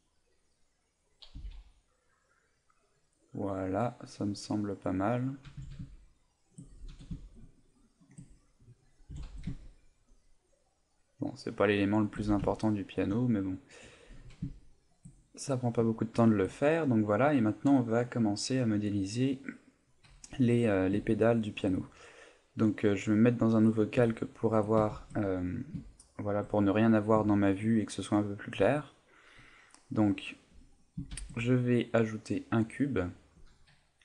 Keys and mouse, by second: 1.4 a, 1.6 middle click, 3.8 right click, 4.6 middle click, 5.5 g, 8.4 right click, 9.1 g, 11.9 shift+click, 12.2 a, 12.6 ctrl+middle click, 13.2 middle click, 14.6 middle click, 15.1 middle click, 15.9 shift+middle click, 20.1 KP_1, 21.2 shift+middle click, 23.3 click, 24.1 shift+middle click, 24.9 shift+c, 26.0 shift+middle click, 28.5 shift+middle click, 29.9 middle click, 31.1 shift+a.